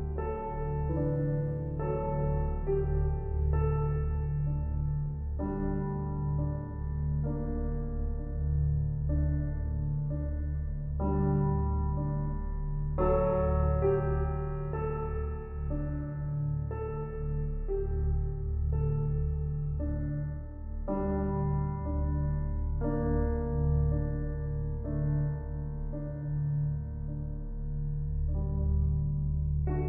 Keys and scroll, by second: 11.8 Return, 13.5 [, 28.3 ctrl+t.